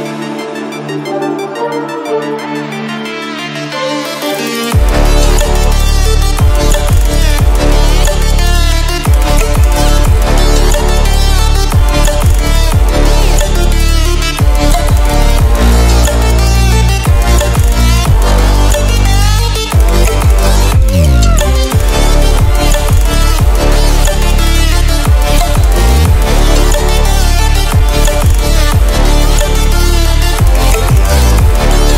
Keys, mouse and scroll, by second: 10.3-16.3 drag, 18.3-20.9 right drag, 20.9 click, 26.1 ctrl+w, 28.5 ctrl+w, 30.0-31.9 drag.